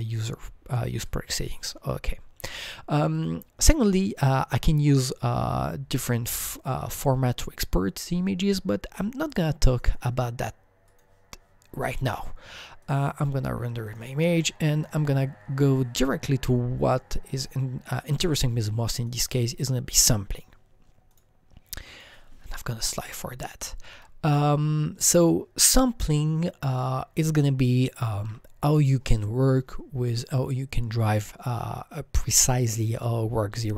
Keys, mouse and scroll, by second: 1.0 click, 2.5 click, 3.1 click, 6.0 click, 9.7 click, 9.7 click, 10.8 click, 12.8 click, 13.4 click, 14.7 click, 19.0 click, 21.1 click, 21.9 click, 23.0 Right, 23.9 Right, 28.1 alt+Tab, 28.3 Right, 30.8-31.8 scroll down 1, 33.6 alt+Tab, 33.6 Right, 33.6 scroll down 1.